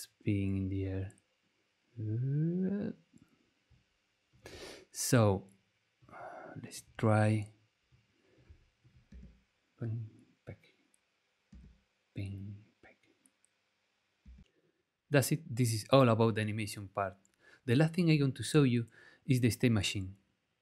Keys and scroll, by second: 9.1 space, 11.5 space, 14.2 space, 16.6 space.